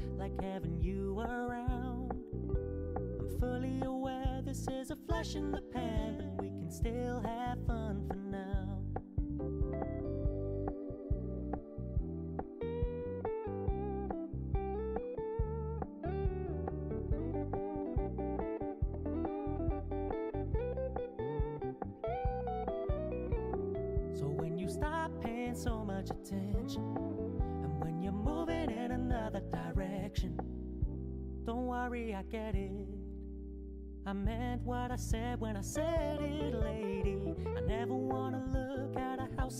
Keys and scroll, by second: 8.4 ctrl+alt+z.